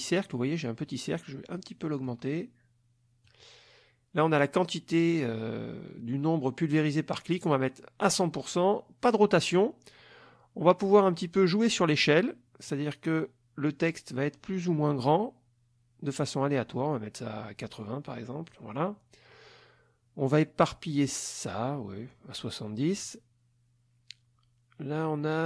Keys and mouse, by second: 2.1-3.4 drag, 7.4 click, 12.7-18.7 drag.